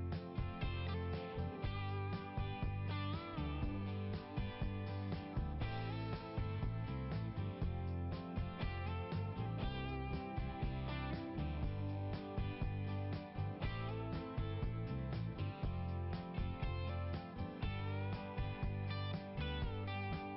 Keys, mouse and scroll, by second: 3.3 click, 3.9 right click, 4.3 click, 4.3 right click, 4.6 right click, 6.8 click, 8.0 right click, 8.3 right click, 9.6 click, 10.7 click, 11.2 click, 12.6 click.